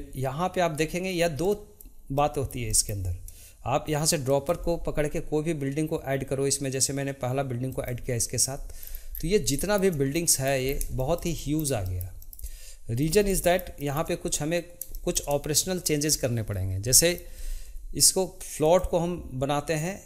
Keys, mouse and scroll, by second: 4.2 click, 8.8-9.5 scroll down 2, 9.5-10.6 shift+middle drag, 10.6-10.9 scroll down 2, 10.9-13.0 shift+middle drag, 13.0 scroll up 1, 13.3-16.5 shift+middle drag, 16.5-16.9 scroll up 1, 16.9-18.6 shift+middle drag, 18.6-20.0 drag.